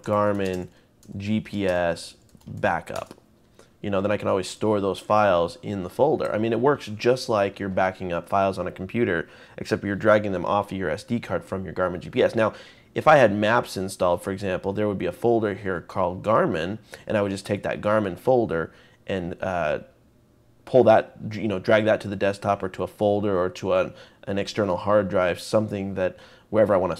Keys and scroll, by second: 0.0-2.9 typing, 5.4 typing.